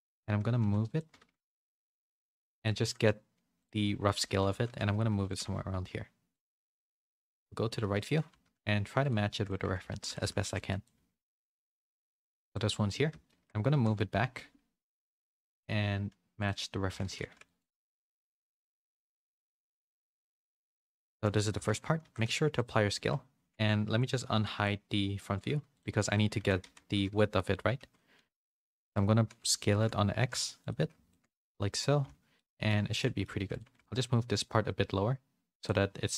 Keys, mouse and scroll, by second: 0.0-1.2 typing, 2.6 s, 2.8 s, 4.5 g, 5.3 g, 7.0 KP_3, 7.7 z, 8.3 g, 9.3 shift+middle click, 9.6 Tab, 9.8-12.0 typing, 13.2 shift+middle click, 13.7 g, 17.0 a, 17.1 c, 17.7 g, 18.9 z, 19.8 a, 19.9 a, 20.3 middle click, 21.0 shift+middle click, 21.3 middle click, 21.5 Tab, 22.0 ctrl+a, 22.9 Tab, 24.3 Tab, 24.3 alt+h, 26.3 Tab, 26.6 a, 26.9 KP_1, 27.7 z, 28.2 alt+s, 29.6 s, 31.0 shift+middle click, 32.0 z, 32.3 middle click, 32.9 middle click, 33.7 3, 33.7 g, 36.0 middle click.